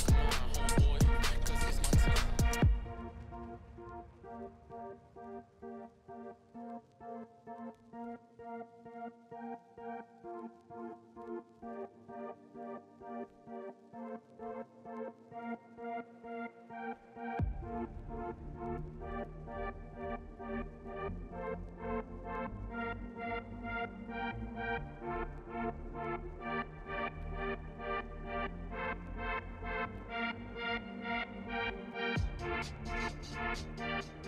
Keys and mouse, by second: 0.2 ctrl+b, 4.1 Tab, 4.6-5.4 middle drag, 5.8 KP_1, 7.0 ctrl+z, 7.3 ctrl+z, 7.6 ctrl+z, 8.0 ctrl+z, 8.1 middle click, 9.8 ctrl+b, 11.0 Tab, 11.8 Tab, 12.3 ctrl+r, 14.6 Tab, 15.4 KP_1, 16.8 right click, 17.7 click, 18.2 click, 18.9 click, 20.5-21.4 middle drag, 21.8 click, 22.1 Tab, 22.2 middle click, 22.2 click, 22.8 1, 23.8 click, 24.3 click, 25.0 KP_1, 25.7 g, 27.2 middle click, 28.2 ctrl+z, 30.7 click, 31.3 g, 32.7 click, 33.0 Tab, 33.3 middle click, 34.2 ctrl+z.